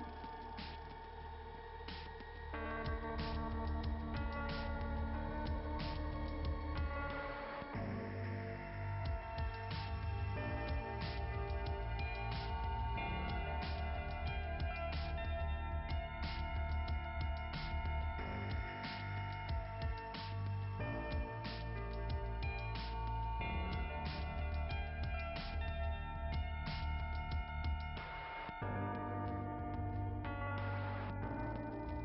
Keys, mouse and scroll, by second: 2.2-3.1 scroll down 2, 4.4-5.5 typing, 7.1 click, 8.7 click, 13.5 scroll down 2, 14.2 click, 15.6 click, 16.6 click, 17.3 scroll down 2, 18.2 click, 19.6 click, 20.6 click, 22.0 click, 23.1 click, 23.3 click, 24.3-25.5 scroll up 2, 28.6-29.2 scroll down 1, 30.0 click.